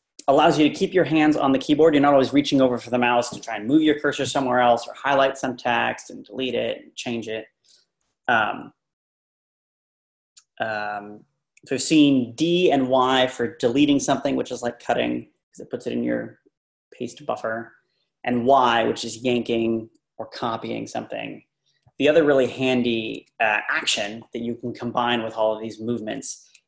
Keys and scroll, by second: 23.2 Left.